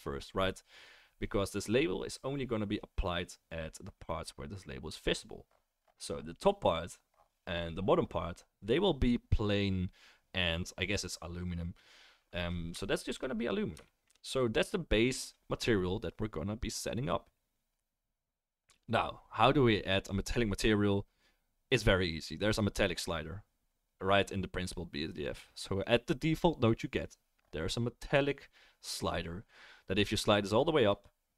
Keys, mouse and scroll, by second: 2.4-22.4 middle drag.